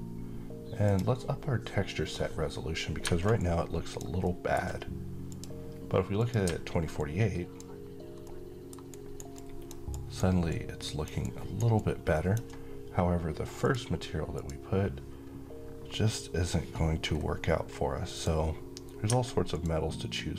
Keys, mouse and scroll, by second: 1.4-3.1 scroll up 2, 3.1 click, 4.0 alt+middle click, 5.0 click, 8.0-8.6 alt+middle click, 8.6 alt+right click, 9.0-10.0 alt+click, 9.6 alt+right click, 10.2-10.8 alt+click, 10.9-12.1 alt+right click, 11.5-13.3 alt+drag, 16.8-17.2 scroll down 1, 17.8 click.